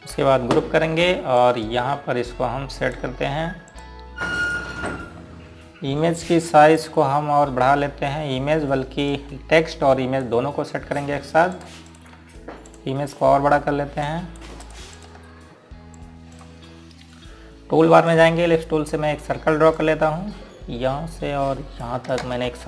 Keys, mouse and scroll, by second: 1.2 ctrl+g, 2.0 scroll down 1, 2.5 click, 4.2 scroll down 1, 4.8 click, 6.2 scroll down 1, 7.8 click, 8.5 scroll up 1, 10.2 click, 15.1 shift+click, 16.1-16.5 scroll down 1, 16.5 scroll up 1, 17.4 click, 20.1 scroll down 1, 20.8 click.